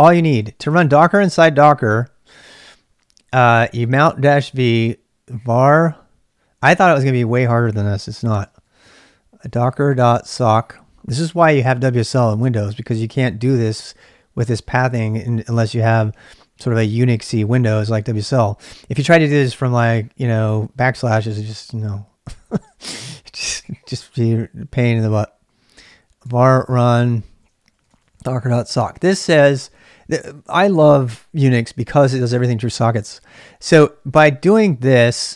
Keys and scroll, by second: 0.0-6.7 typing, 7.9-10.9 typing, 22.8-24.6 typing, 25.9-29.2 typing.